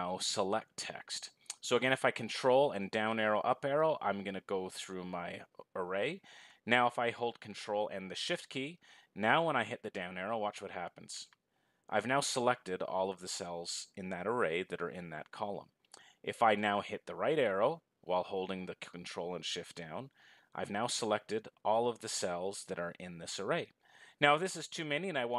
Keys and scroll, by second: 10.3 ctrl+shift+Down, 19.8 ctrl+shift+Right.